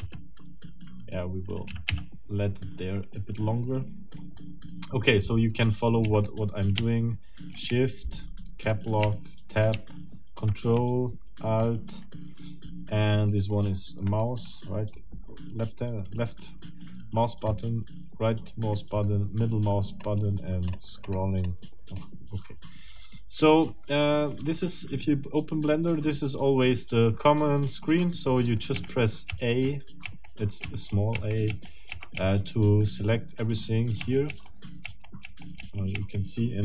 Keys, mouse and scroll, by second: 0.0 d, 1.7 d, 1.9 e, 6.0 a, 7.7 shift+Caps_Lock, 9.0 Tab, 13.7 middle click, 14.2 click, 14.9-17.4 drag, 17.5-18.9 right drag, 19.1 click, 20.0 scroll up 2, 20.3 scroll down 2, 20.7 scroll up 2, 20.9 scroll down 2, 21.1 scroll up 2, 21.2 scroll down 2, 21.4 scroll up 2, 21.6 scroll down 2, 21.9 scroll up 2, 22.3 scroll down 2, 22.9-24.3 middle drag, 26.9 middle click, 28.5 click, 28.7 a, 34.0 a.